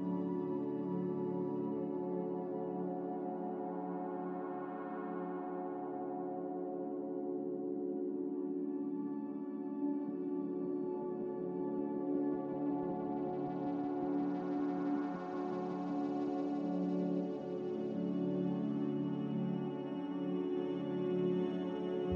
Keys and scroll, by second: 2.8-3.8 typing, 4.0 Return, 7.3 Return, 7.3 3, 7.3 0, 10.4 z, 16.6 n.